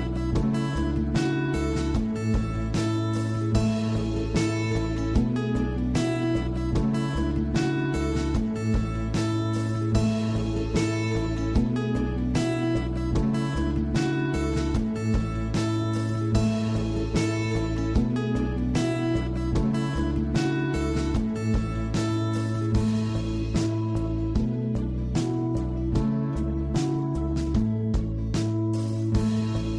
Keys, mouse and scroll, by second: 1.2-3.1 drag, 3.6 scroll down 2, 3.8-4.3 middle drag, 4.3-5.0 scroll up 6, 5.0-6.8 middle drag, 6.8-9.2 drag, 9.5-9.9 scroll down 4, 9.9-11.2 middle drag, 11.2 s, 12.4-13.4 scroll down 8, 12.8 middle click, 13.4-14.0 shift+middle drag, 14.0 scroll up 1, 14.2 shift+middle drag, 14.4 scroll down 2, 14.6 middle drag, 14.9 scroll up 1, 15.1-15.4 shift+middle drag, 15.4-15.8 scroll up 3, 15.9-17.1 shift+middle drag, 17.1 click, 18.5-19.4 drag, 20.1-23.1 drag, 23.5 scroll down 1, 23.8 scroll up 1, 23.8 shift+middle click, 23.9-24.6 scroll down 2, 24.1 click, 24.8 click, 25.1 scroll down 1, 25.2 shift+middle drag, 25.4 click, 27.8 scroll down 1, 27.9 middle click, 28.4 click, 28.5 click.